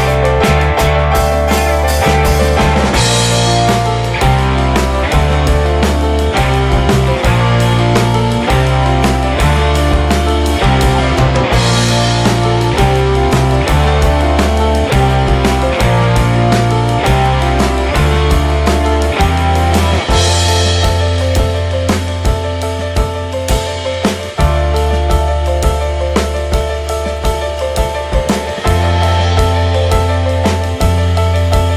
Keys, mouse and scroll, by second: 0.6-4.5 drag, 4.5-15.8 right drag, 16.2 middle click, 17.5-24.0 right drag, 28.1-31.0 drag.